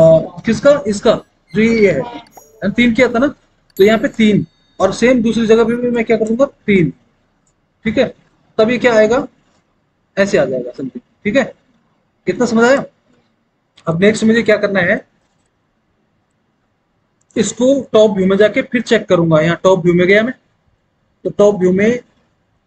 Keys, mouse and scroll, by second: 4.1 Return, 7.0 KP_3, 7.4 Return, 18.9 alt+w, 19.7 alt+w.